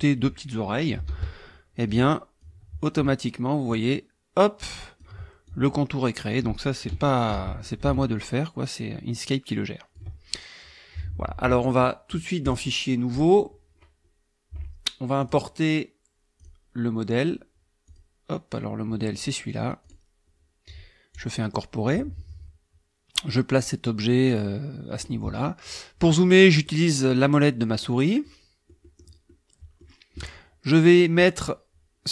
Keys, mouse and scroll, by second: 1.1 ctrl+d, 1.9 F1, 2.4-5.2 drag, 5.5-6.4 ctrl+drag, 7.3 ctrl+d, 7.7-10.1 ctrl+drag, 12.5 click, 13.1 click, 15.2 click, 16.4 click, 17.9 click, 19.8 click, 21.1 click, 21.9-25.2 drag, 26.5 middle click, 26.5-27.4 scroll down 4, 27.1 middle click, 27.7 click, 28.2 click, 28.8 middle click, 29.3 click.